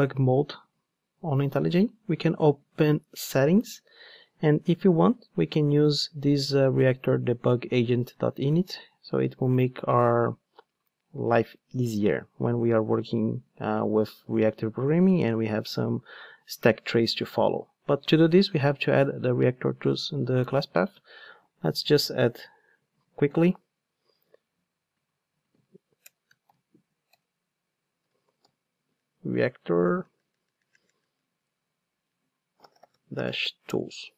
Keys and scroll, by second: 27.5 Return, 34.0 Return.